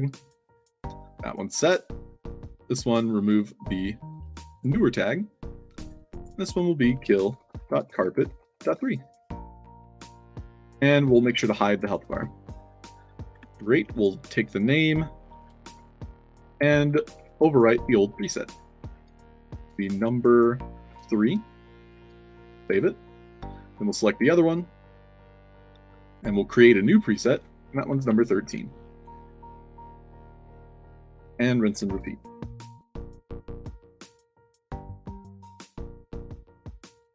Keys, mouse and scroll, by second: 0.2 right click, 1.5 click, 3.0 click, 4.0 click, 4.4 click, 5.7 click, 6.1 click, 6.7-8.6 typing, 9.6 click, 10.3 click, 10.9 click, 13.3 scroll up 2, 13.8 click, 14.0 click, 14.4 middle click, 14.7 middle drag, 15.2 click, 15.7 ctrl+c, 16.0 click, 16.8 click, 17.1 ctrl+v, 17.6 click, 18.5 click, 18.9 ctrl+v, 19.3 space, 20.8 3, 21.4 ctrl+a, 21.4 ctrl+s, 21.8 ctrl+c, 22.1 click, 23.4 click, 23.7 click, 24.6 click, 25.4 click, 26.0 click, 27.0 click, 27.3 ctrl+v, 28.8 1, 29.6 click, 30.7 click, 34.6 click, 35.8 i, 36.2 click.